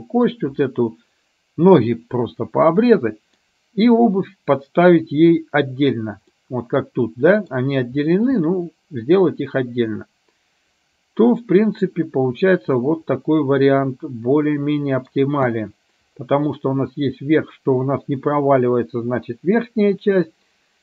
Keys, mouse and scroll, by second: 3.1-4.1 middle drag, 6.5-7.7 middle drag, 8.5-15.5 middle drag.